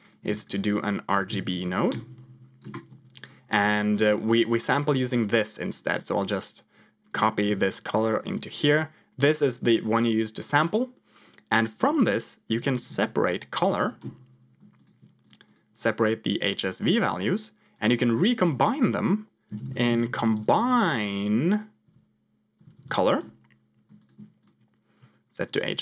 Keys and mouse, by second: 0.2 shift+a, 3.2 click, 4.0 middle click, 7.4 ctrl+c, 8.1 ctrl+v, 8.7 click, 11.2-14.0 drag, 15.1 click, 15.4-16.5 drag, 16.8 ctrl+click, 18.1-23.1 drag, 22.6 Down, 22.7 Down, 23.9 ctrl+click, 24.4-25.5 drag.